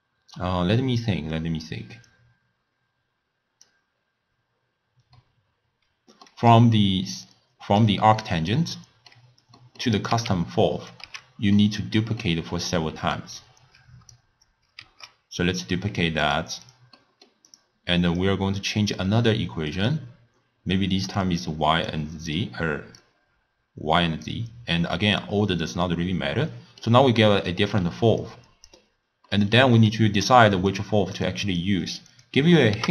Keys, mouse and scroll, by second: 4.0-5.2 scroll down 2, 5.2-7.3 middle drag, 7.3 click, 8.2-10.0 middle drag, 10.0 click, 10.5 x, 10.8 click, 11.4 x, 11.6-13.4 middle drag, 13.4 click, 15.2 shift+d, 16.7 click, 17.0-17.5 middle drag, 17.5 drag, 18.2-23.1 drag, 25.2 click, 26.5-28.2 middle drag, 28.2 click, 29.3-30.7 middle drag, 30.7 click, 31.5 click, 31.9 drag, 32.2 click, 32.8 ctrl+a.